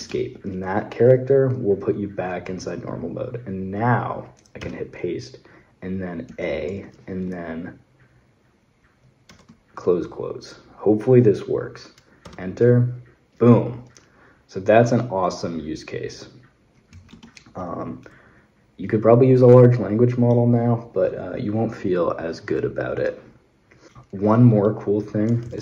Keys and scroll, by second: 4.4 p, 6.1 a, 9.1 shift+', 12.0 Return, 16.7 space, 16.7 w, 16.9 Escape, 23.9 Escape, 24.3 Escape, 24.8-25.6 typing.